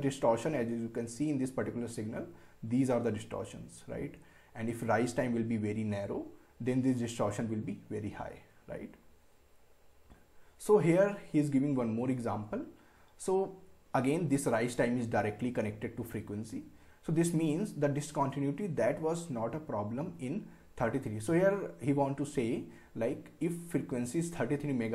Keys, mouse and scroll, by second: 8.5 scroll up 1.